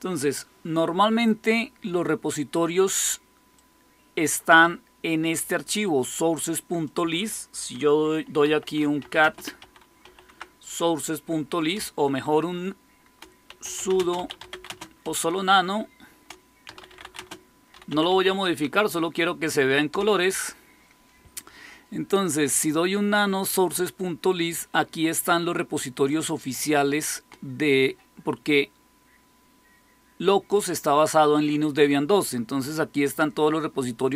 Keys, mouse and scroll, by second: 3.5-6.5 drag, 6.8 click, 8.1-10.5 typing, 11.6-18.5 typing, 18.5 Tab, 19.8 Return, 26.0-30.5 drag.